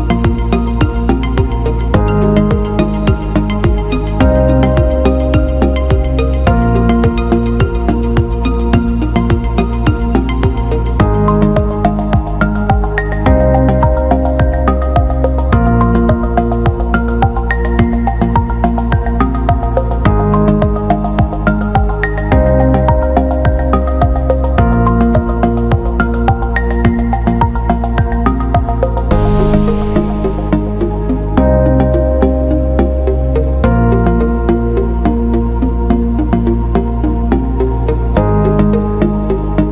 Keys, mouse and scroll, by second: 3.4 click, 5.5 click, 7.8-9.4 drag, 9.7 click, 10.1 Tab, 10.9-12.2 alt+middle drag, 13.4 click, 14.1-15.2 drag, 15.8 Tab, 16.4 middle click, 17.5 click, 17.8 middle click, 19.2 click, 20.2 click, 21.8 shift+click, 23.8 click, 24.6 click, 25.5-31.8 drag, 32.1 alt+middle click, 32.6 alt+shift+middle click, 32.8 alt+middle click, 34.5 click, 36.2-38.7 drag, 39.3 alt+middle click.